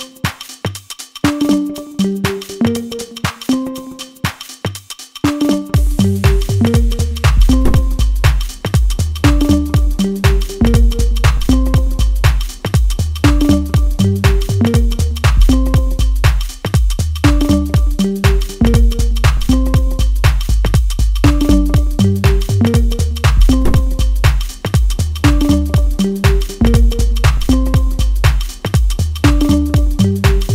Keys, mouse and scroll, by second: 1.4-20.3 drag, 20.3-24.0 middle drag, 24.0 click, 25.5-25.9 scroll down 1, 25.9-27.6 middle drag, 27.6 click, 28.2 shift+middle click, 28.9-29.4 scroll down 1, 29.6-30.5 shift+middle drag.